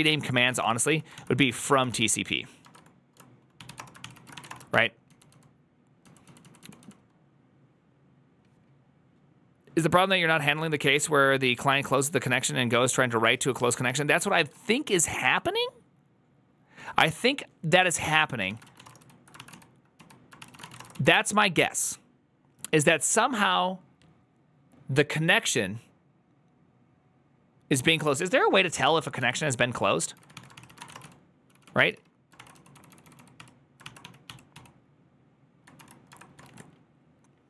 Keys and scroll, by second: 0.0-6.1 typing, 18.3-21.1 typing, 20.3 ctrl+c, 28.8-36.3 typing, 32.2 ctrl+d.